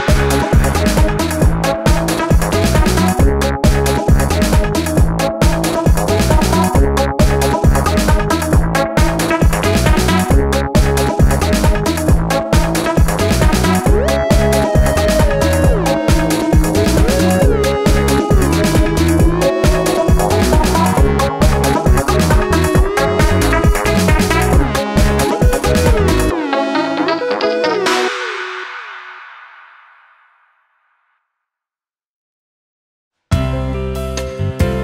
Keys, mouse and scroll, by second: 1.6 ctrl+shift+a, 2.0 alt+scroll down 1, 2.1 space, 3.2 alt+scroll up 1, 3.4 space, 4.9 space, 8.6 space, 10.7 space, 11.5 ctrl+shift+a, 15.0 space, 21.3-21.8 alt+scroll down 1, 21.9 space, 22.5 alt+scroll down 1, 23.2 space.